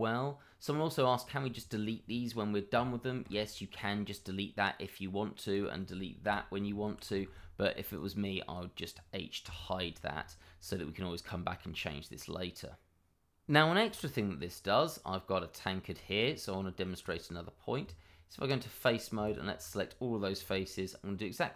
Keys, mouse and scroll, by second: 1.5 shift+middle click, 1.6 middle click, 1.7 shift+middle click, 3.2 Delete, 4.1 middle click, 5.5 click, 6.2 Delete, 6.8 ctrl+z, 7.9 ctrl+click, 8.3 double click, 8.4 click, 10.2 shift+middle click, 10.8 middle click, 11.4 shift+middle click, 11.5 middle click, 14.0 shift+middle click, 14.1 middle click, 14.1 shift+middle click, 14.5-14.8 scroll up 1, 14.8 middle click, 16.3-16.6 scroll up 1, 16.6 middle click, 17.0 click, 17.8 Tab, 19.2 alt+click, 19.3 click.